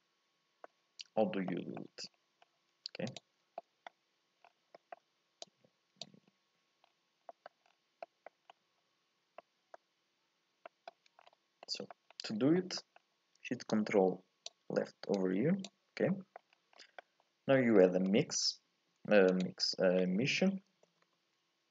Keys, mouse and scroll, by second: 0.7-3.2 scroll up 1, 3.2 ctrl+shift+click, 5.4 click, 8.2 shift+middle click, 8.5-9.1 scroll up 2, 11.2 scroll down 4, 11.6 middle click, 12.1-13.9 scroll up 2, 13.9 click.